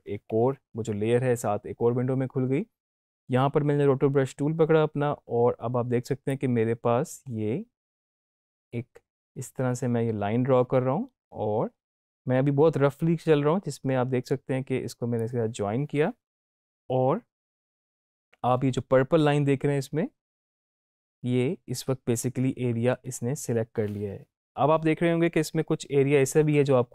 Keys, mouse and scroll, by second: 6.2-15.4 drag.